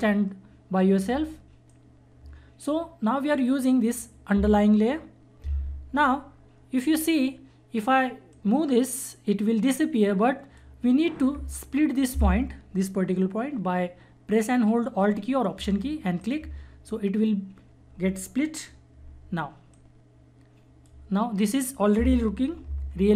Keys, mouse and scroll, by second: 1.6-5.3 drag, 8.3 click, 8.3-13.2 drag, 15.6 alt+Num_Lock, 15.6 click, 19.7-22.7 drag, 22.7 ctrl+-.